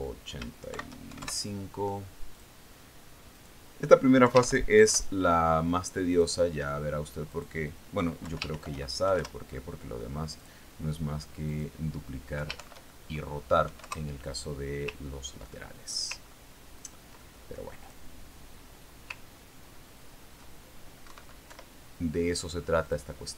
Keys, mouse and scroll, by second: 0.4 click, 1.2 click, 2.2 shift+End, 2.5 shift+KP_5, 2.7 shift+KP_Enter, 3.8 click, 4.8 click, 5.7 Left, 5.9 shift+End, 6.3 shift+KP_5, 6.4 shift+KP_Enter, 7.6 click, 8.8 click, 9.7 Left, 10.0 shift+End, 10.6 shift+KP_5, 10.7 shift+KP_Enter, 11.9 click, 13.0 click, 13.9 Left, 14.1 shift+End, 15.2 KP_5, 15.3 KP_Enter, 16.6-17.2 ctrl+scroll down 2, 17.3 ctrl+middle click, 17.6-18.4 ctrl+scroll up 2, 18.4-18.7 ctrl+scroll down 2, 18.7 ctrl+middle click, 19.2 ctrl+scroll up 2, 19.3 ctrl+click, 20.0 scroll up 2, 20.9-21.6 ctrl+scroll up 4, 21.6 ctrl+scroll down 2, 22.6 Right, 23.0 Left.